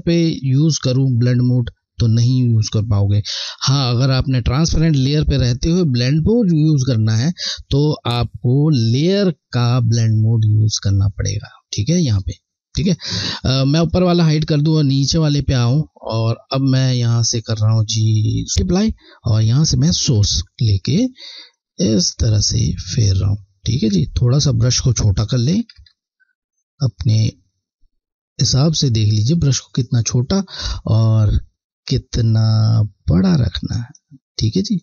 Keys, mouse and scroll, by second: 9.1 click, 13.8 click, 20.0 alt+click, 26.9 click, 32.1 click.